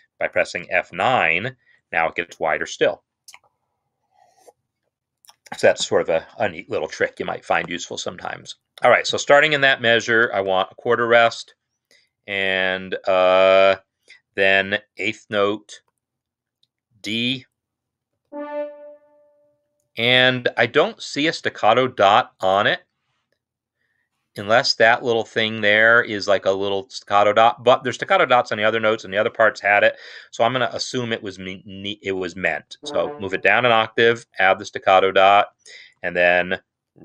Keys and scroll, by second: 1.4 F9, 9.5-10.9 typing, 15.8 4, 18.0 typing, 32.7 ctrl+Down, 34.1 shift+s.